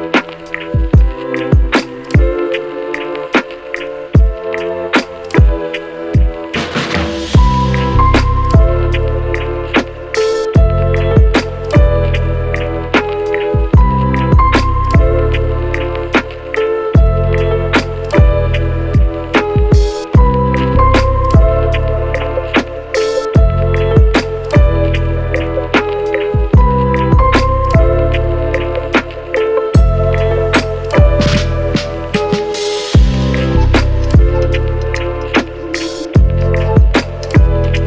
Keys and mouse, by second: 0.3 KP_1, 0.8 shift+click, 1.0 shift+d, 1.6 shift+d, 1.8 shift+click, 2.1 shift+click, 2.5 ctrl+shift+j, 2.7 ctrl+KP_Subtract, 2.9 h, 3.7 shift+click, 4.0 click, 4.2 shift+click, 4.5 Tab, 4.7 q, 5.0 click, 5.2 q, 6.5 h, 6.5 click, 7.1 Tab, 7.1 click, 7.3 Tab, 7.3 q, 7.5 Tab, 7.7 a, 7.9 3, 9.2 Tab, 9.2 ctrl+x, 9.2 ctrl+click, 9.4 ctrl+x, 9.6 KP_7, 9.9 shift+click, 10.0 Tab, 10.2 shift+click, 10.4 a, 10.4 l, 10.4 p, 12.2 shift+click, 12.5 Tab, 13.1-15.6 typing, 13.2 shift+click, 13.3 Tab, 14.8 shift+middle click, 16.0 shift+middle click, 16.7 shift+click, 17.0 k, 18.1 Tab, 18.1 ctrl+click, 18.3 ctrl+x, 19.7-21.2 typing, 21.3 alt+x, 21.8 ctrl+alt+z, 21.9 alt+x, 22.4 a, 22.5 3, 22.6 Tab, 22.7 ctrl+x, 22.9 KP_7, 23.1 shift+middle click, 23.6 shift+middle click, 23.9 shift+middle click, 24.1 j, 24.3 shift+middle click, 24.7 ctrl+r, 24.8 ctrl+click, 25.0 ctrl+r, 25.1 ctrl+r, 25.1 ctrl+shift+click, 25.6 j, 26.2 shift+click, 26.6 shift+Tab, 26.6 shift+click, 27.1 middle click, 27.2 u, 27.4 shift+middle click, 28.2 ctrl+a, 28.8 middle click, 29.4 KP_0, 30.0 u, 30.1 shift+click, 32.5 middle click, 34.4 KP_Divide, 34.4 a, 35.2 shift+click, 35.5 shift+middle click, 36.3 shift+middle click, 36.5 shift+middle click, 36.7 shift+middle click, 36.7 KP_1, 36.7 shift+a, 37.6 middle click.